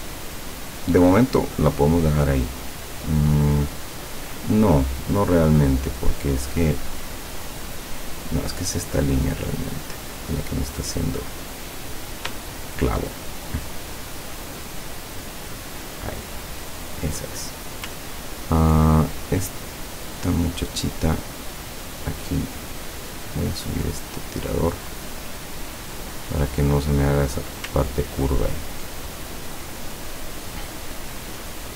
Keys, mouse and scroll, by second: 1.4 click, 2.1 click, 8.6 click, 9.2 click, 9.6 click, 12.0 click, 12.8 shift+click, 14.4-17.1 drag, 17.4 click, 18.2-18.7 ctrl+scroll up 1, 19.1 ctrl+click, 20.1 click, 21.3 click, 23.2-26.8 drag, 28.0-28.7 ctrl+scroll down 6.